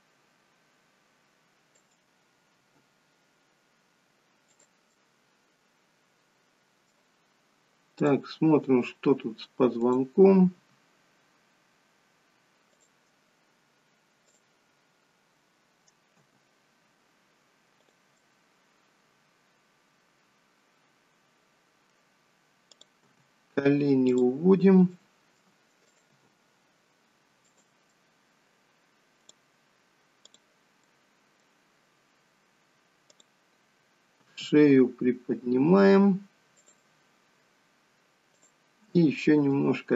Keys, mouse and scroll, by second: 2.6 r, 4.8 middle click, 7.9 click, 9.6 click, 10.3 r, 14.2 click, 16.1 g, 18.2 middle click, 22.7 click, 23.0 g, 24.9 middle click, 25.8 click, 26.1 g, 27.8 middle click, 30.7 middle click, 33.0 click, 34.2 r, 38.4 click, 39.3 r.